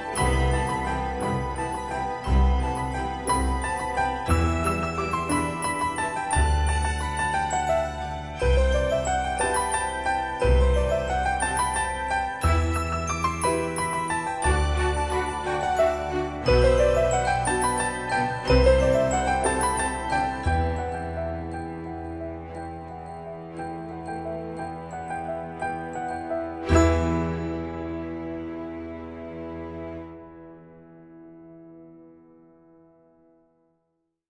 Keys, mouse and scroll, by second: 0.1 Return, 1.1 click, 2.5 right click, 5.7 typing, 8.2 space, 8.9 click, 16.1-16.7 typing, 18.2 typing, 19.3 shift+middle click, 24.8 click, 27.4-28.0 scroll up 1, 28.2-28.6 scroll down 1, 28.6-29.4 scroll up 1.